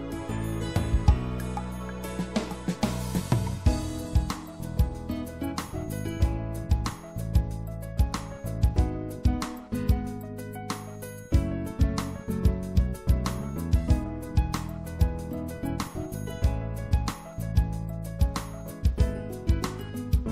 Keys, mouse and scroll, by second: 17.4-20.3 middle drag.